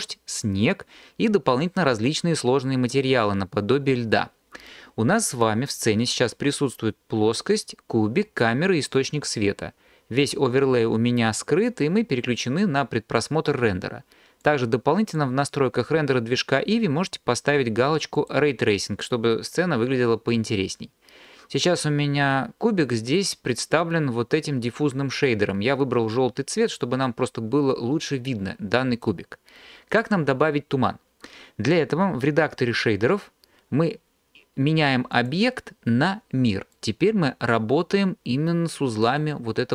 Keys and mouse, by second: 14.5 click, 18.3 click, 20.8 click, 35.3-36.9 drag.